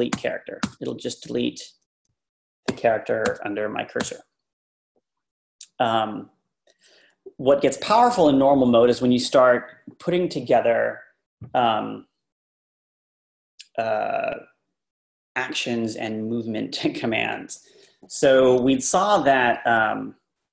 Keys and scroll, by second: 0.1-0.6 typing, 2.7 x, 18.2 Page_Up, 18.6 Page_Down.